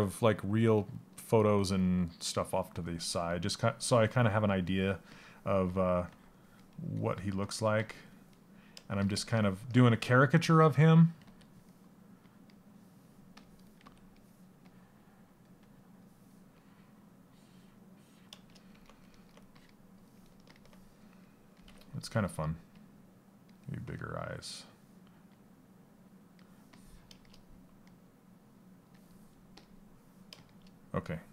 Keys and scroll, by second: 13.4 s.